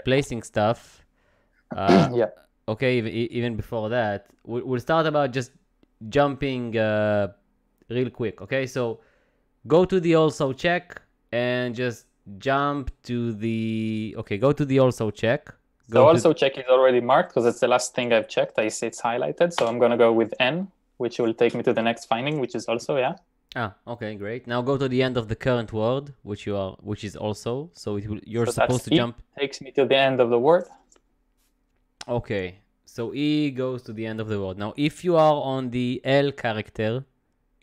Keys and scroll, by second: 0.0-0.7 typing, 19.6 n, 28.8 e.